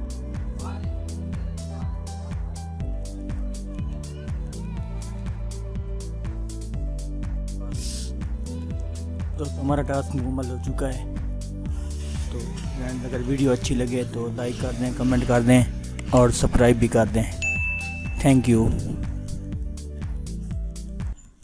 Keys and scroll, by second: 5.4 ctrl++, 7.0 ctrl+-, 9.9 ctrl++, 11.8 ctrl+-, 12.8 ctrl++, 20.9 F10.